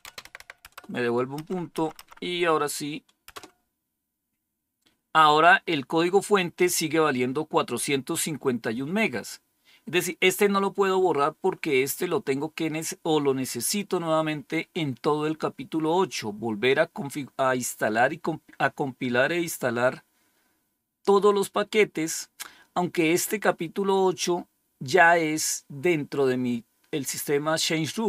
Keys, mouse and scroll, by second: 0.0-3.3 typing, 12.3-14.0 scroll down 1, 15.3-16.1 scroll down 2, 20.9-22.2 scroll down 3, 23.0-24.7 scroll up 2.